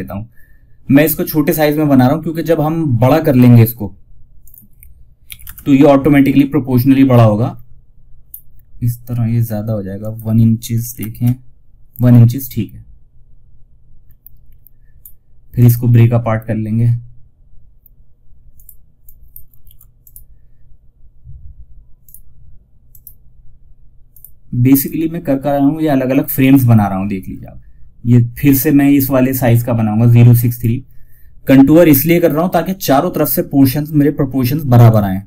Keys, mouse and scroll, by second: 3.7 click, 6.0 scroll down 1, 7.6 scroll up 1, 9.3 click, 13.3 scroll down 1, 14.3-14.8 scroll up 1, 14.8 right click, 17.9 click, 18.9 ctrl+z, 19.3 right click, 23.4 click, 27.9 scroll up 1, 29.8 click, 34.0 click.